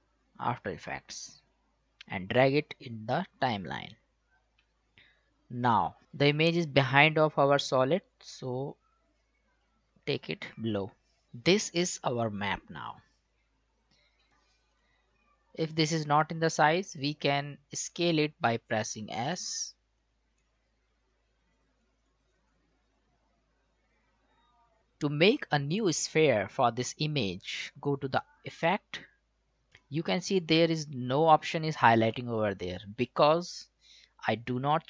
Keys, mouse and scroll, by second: 8.2-11.2 drag, 14.3 click, 17.8 click, 19.2 s, 20.0-24.8 drag, 28.5 click, 33.9 click.